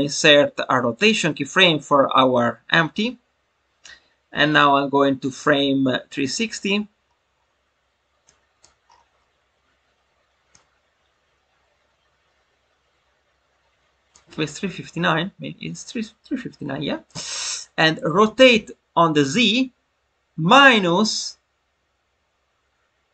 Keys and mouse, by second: 5.3-6.4 drag, 8.2-8.6 drag, 10.4-14.1 drag.